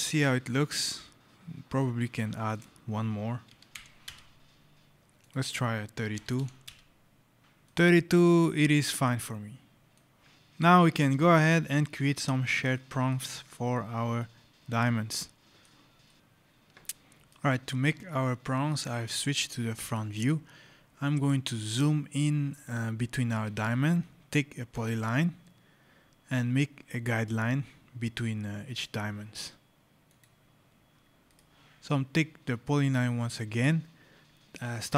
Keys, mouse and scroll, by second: 0.2 middle click, 0.7 scroll, 2.4 click, 3.3 KP_3, 3.7 KP_1, 3.9 Return, 5.1 click, 6.0 KP_3, 6.2 KP_2, 6.5 Return, 7.4 right click, 7.8 scroll, 8.5-9.1 scroll, 8.8 right click, 9.8 right click, 9.9 scroll, 11.0 scroll, 11.4 right click, 11.5-11.9 scroll, 12.6 right click, 13.6 right click, 15.6 scroll, 15.9 right click, 16.1 click, 16.7 right click, 17.3 right click, 20.5 scroll, 23.0-24.6 scroll, 24.6 click, 25.9 scroll, 27.1 scroll, 28.7 click, 30.0 click, 30.6 right click, 30.7 scroll, 31.1 right click, 32.3 scroll.